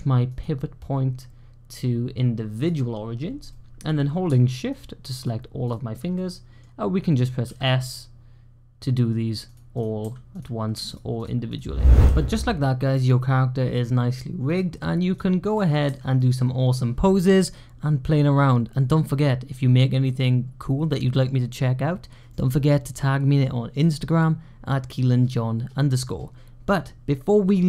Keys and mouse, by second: 0.3-2.5 drag, 3.3-3.7 middle drag, 4.6 shift+click, 4.6 typing, 6.0 middle click, 6.2-7.3 typing, 9.4-11.3 typing, 9.6 click, 10.8 shift+click, 15.7 s.